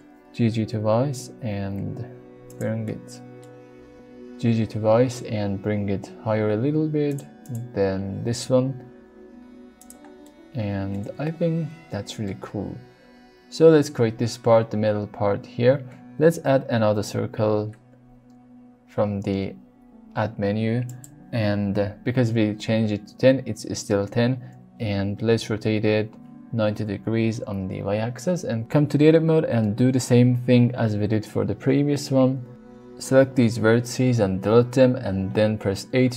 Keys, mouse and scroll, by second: 0.4 g, 0.6 g, 2.4 click, 2.9 middle click, 7.0 click, 7.4 click, 8.2 g, 8.4 g, 9.8 click, 10.2 middle click, 11.0 Tab, 11.2-12.3 middle drag, 16.3 shift+a, 24.7 r, 25.2 y, 25.7 KP_9, 26.7 KP_Enter, 26.7 KP_0, 28.7 Tab, 29.0 middle click, 31.3 1, 32.8 click, 34.2 x, 35.3 middle click.